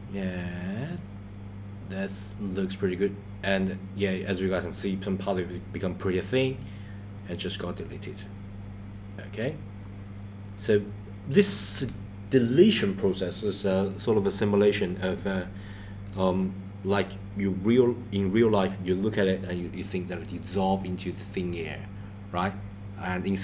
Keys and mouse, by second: 16.2 click.